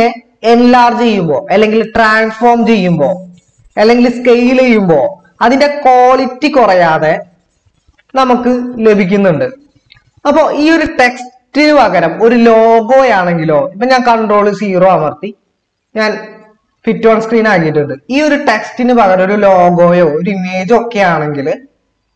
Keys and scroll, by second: 11.2 ctrl+-, 14.8 ctrl+0.